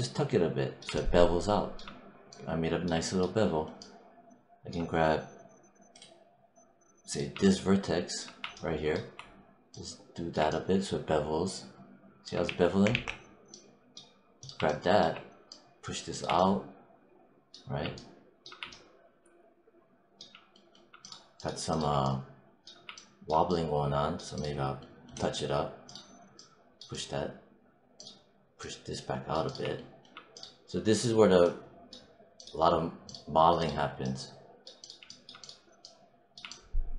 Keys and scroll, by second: 12.3 z.